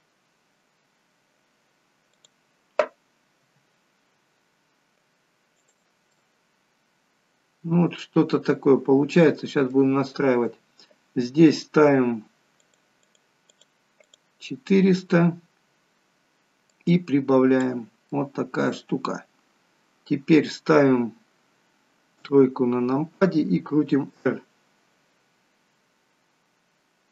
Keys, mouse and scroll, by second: 3.4 r, 6.2 middle click, 12.5 click, 13.1 click, 14.0 click, 16.6 click, 18.1 middle click, 22.1 KP_3, 23.7 r.